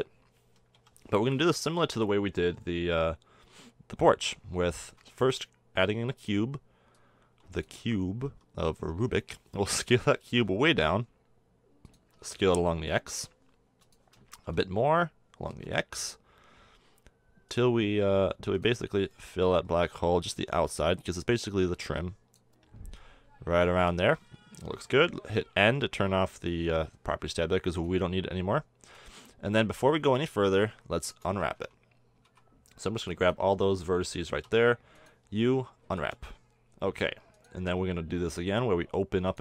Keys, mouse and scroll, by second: 0.7 KP_7, 4.8 shift+a, 8.2 s, 10.4 s, 12.1 s, 14.4 s, 17.8 s, 18.8 s, 20.4-25.6 drag, 25.6 n, 26.5 KP_1, 27.0-29.6 drag, 30.7 middle drag, 31.5 Tab, 32.2 a, 32.9 b, 34.4 u, 35.8 a, 36.0 Tab.